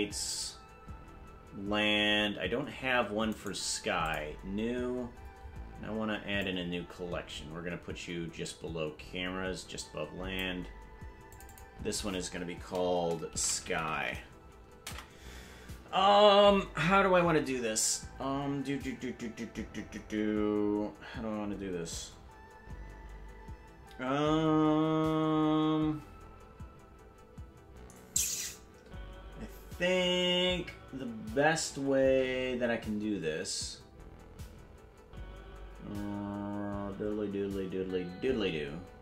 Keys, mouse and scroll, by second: 0.1-1.1 scroll up 4, 3.3-4.4 right drag, 5.1-5.7 scroll down 12, 6.4-10.6 drag, 6.9-7.5 scroll up 6, 11.3 click, 11.5-39.0 drag.